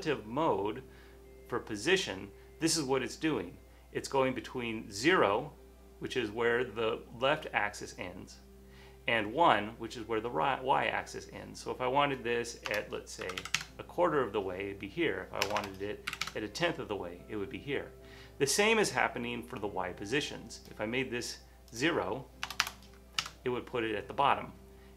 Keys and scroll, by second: 12.8-13.9 typing, 15.6 BackSpace, 16.1 1, 16.2 1, 16.3 Tab, 20.6 0, 22.6 BackSpace, 22.7 BackSpace, 23.3 Return.